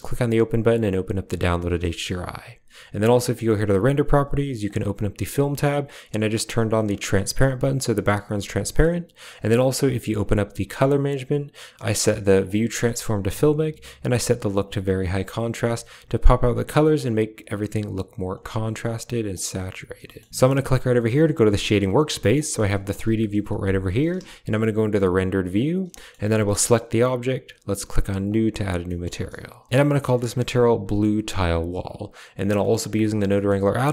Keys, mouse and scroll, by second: 1.8 shift+middle click, 3.2 click, 4.5 click, 5.3 click, 6.3 click, 6.8 click, 7.2 click, 7.6 click, 9.2 drag, 9.7 click, 12.4 click, 14.0 click, 16.9-18.0 drag, 19.1 click, 20.0 shift+middle click, 22.2 middle click, 23.0 KP_0, 24.0 z, 25.4 click, 25.9 shift+middle click, 28.1 click, 28.7 middle click, 29.7 ctrl+z, 29.8 click, 30.7 middle click, 31.7 drag, 32.0 click, 32.5 middle click, 32.8 a, 32.8 click, 33.2 click.